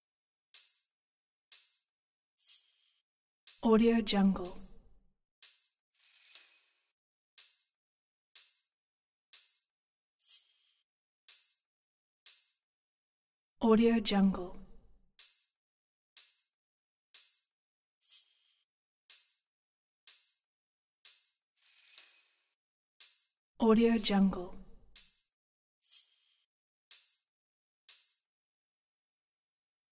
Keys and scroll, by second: 0.1 typing, 1.2-1.9 typing.